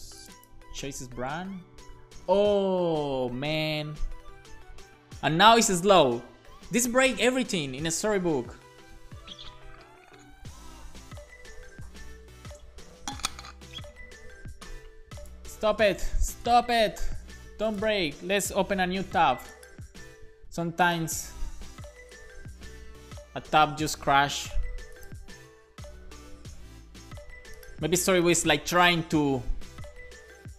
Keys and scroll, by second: 3.4 Right, 3.8 Right, 4.7-5.9 typing, 6.7 super+s.